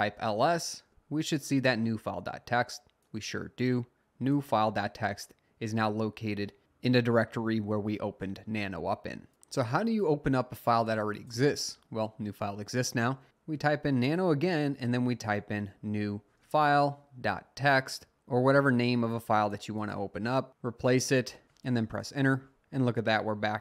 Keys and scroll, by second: 0.0-0.5 typing, 13.0-16.4 typing, 16.5 Tab, 21.9 Return.